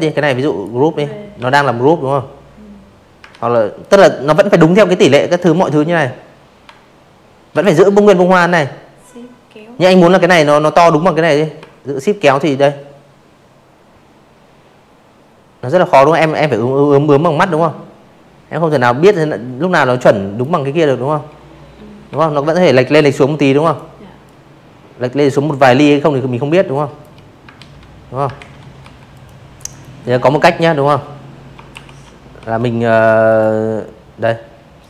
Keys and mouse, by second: 0.2 ctrl+z, 0.8 click, 2.4 ctrl+g, 9.2-17.4 shift+drag, 20.6 shift+click, 21.2-24.0 shift+drag, 24.5 ctrl+z, 25.3 ctrl+z, 25.7 v, 26.1 click, 26.6 click, 28.6 ctrl+shift+], 29.3 v, 29.9 click, 30.2 click, 31.7 click, 32.1 click, 32.5 right click, 33.7 click, 33.9 click, 34.2 click.